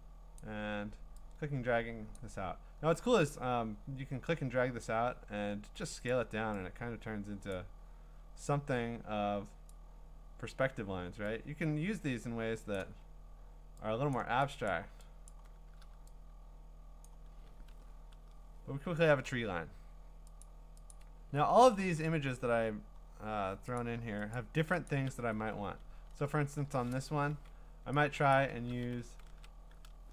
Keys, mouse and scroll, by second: 0.4 click, 2.1 click, 4.8 click, 6.1 click, 9.7 click, 14.1 click, 14.7 click, 15.3 click, 17.0 click, 17.5-19.1 scroll, 20.4 click, 20.9 click, 21.5 scroll, 22.7-23.8 scroll, 23.8 click, 24.3 click, 24.9 click, 25.2 v, 25.7-26.9 scroll, 27.1 w, 28.3 click, 29.3 ctrl+d.